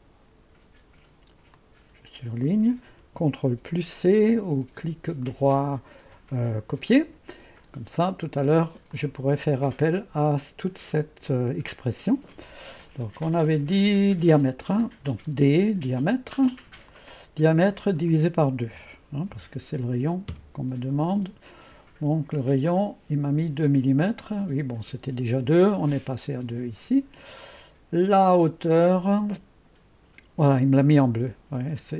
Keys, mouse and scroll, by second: 1.7 click, 3.6 ctrl+c, 5.3 click, 6.8-7.7 drag, 9.0-12.1 drag, 15.1 d, 16.9-18.0 drag, 18.8 KP_Divide, 19.0-21.0 typing, 22.7-25.3 drag, 28.8 click.